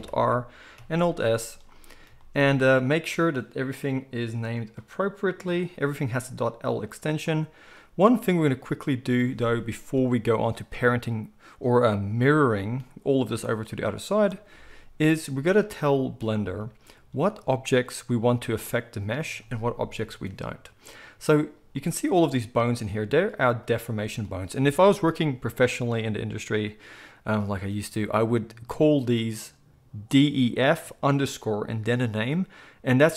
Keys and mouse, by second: 0.8 alt+s, 1.8-2.3 shift+middle drag, 2.6 middle click, 2.9 click, 3.8-23.0 middle drag, 23.0 click, 23.1-23.9 middle drag, 23.9 click, 24.1-33.1 middle drag.